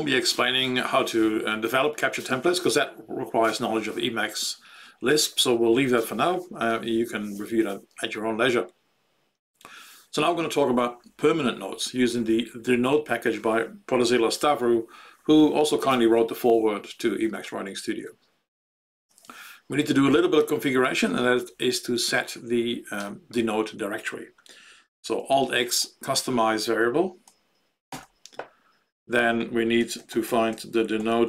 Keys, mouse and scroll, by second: 25.3 alt+x, 27.9 alt+x, 29.5-31.2 typing.